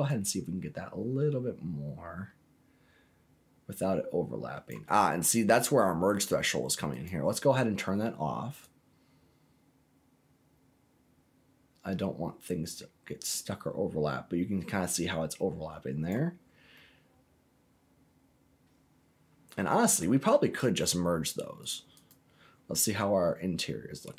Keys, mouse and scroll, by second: 0.0-4.6 drag, 6.9 click, 8.6-16.1 drag, 16.4-16.7 scroll down 2, 16.7-19.9 middle drag, 22.0 click, 22.4-22.9 scroll down 2, 22.9-24.1 middle drag.